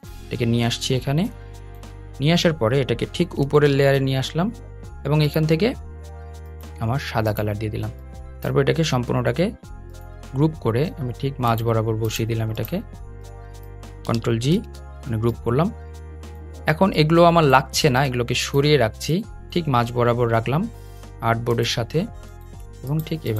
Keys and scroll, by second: 3.4 super+}, 14.2 super+g.